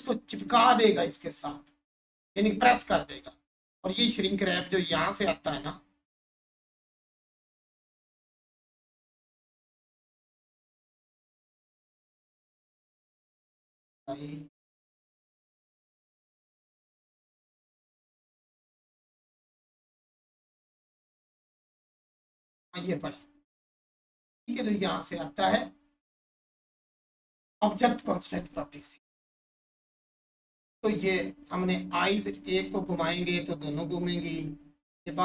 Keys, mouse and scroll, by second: 5.0 click, 21.3 click, 29.4 click, 30.0 1, 30.8 scroll up 1, 31.6 click.